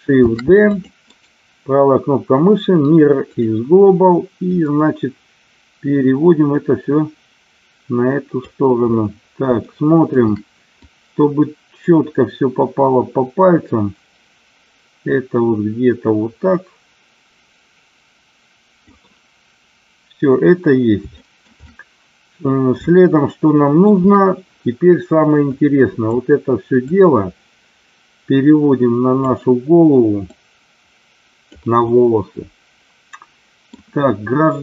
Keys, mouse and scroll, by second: 0.3 shift+d, 0.7 click, 3.1-4.5 right drag, 4.5-8.4 drag, 9.6 shift+middle click, 10.0 scroll down 1, 10.9-18.9 drag, 21.2 shift+middle click, 21.5 middle click, 22.4 scroll down 1, 22.9-23.8 scroll up 1, 25.5 click, 26.8-29.2 drag, 30.2-31.4 drag, 31.9-33.7 middle drag.